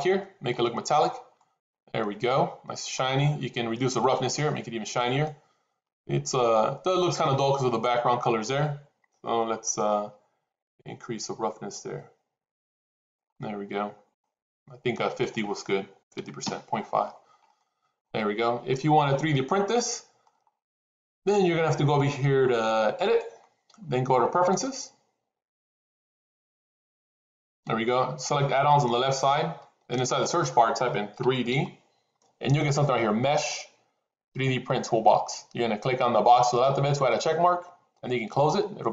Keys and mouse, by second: 1.3 middle click, 1.9 middle click, 4.0 click, 5.1-7.3 middle drag, 10.7-13.0 drag, 13.2 middle click, 15.0-16.9 drag, 17.5 middle click, 18.6-20.1 middle drag, 23.1-27.0 drag.